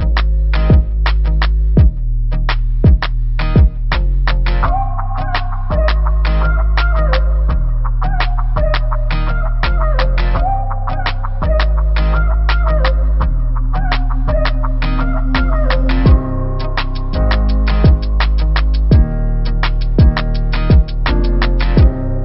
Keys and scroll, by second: 0.9 space, 2.0 BackSpace, 2.1 BackSpace, 2.3 BackSpace, 4.0 s, 5.1 typing, 6.2 space, 7.5-8.0 typing, 9.0 space, 9.4 b, 10.3 space, 11.4 a, 13.6 BackSpace, 13.7 BackSpace, 13.8 BackSpace, 14.8 s, 18.6 v, 20.9 ctrl+=, 21.4 space.